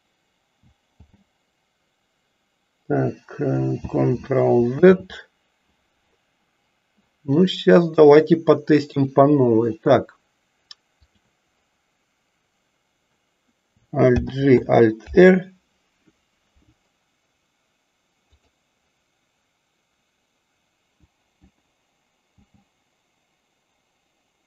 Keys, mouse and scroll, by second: 0.9 alt+g, 4.7 ctrl+z, 7.9-9.2 drag, 11.0 click, 14.2 alt+g, 15.0 alt+r, 22.3 g.